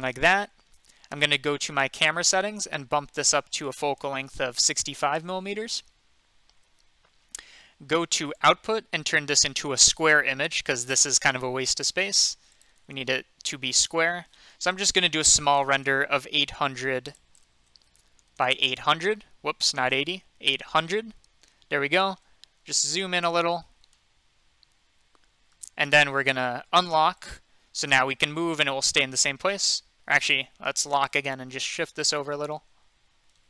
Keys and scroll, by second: 4.4-5.2 typing, 9.9 typing, 15.0-15.8 typing, 17.4-18.3 typing, 19.8-21.4 typing.